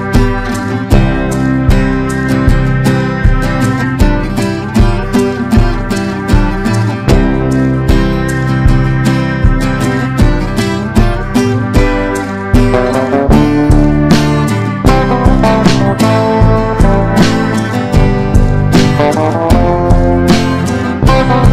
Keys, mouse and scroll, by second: 19.8 shift+click.